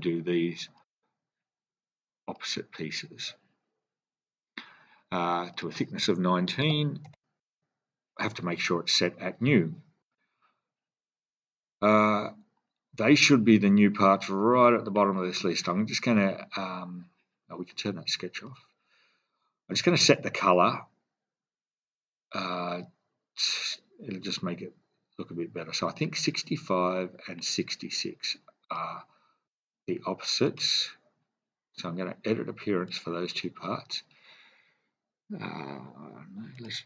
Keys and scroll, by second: 6.6-7.1 typing, 7.4 Return.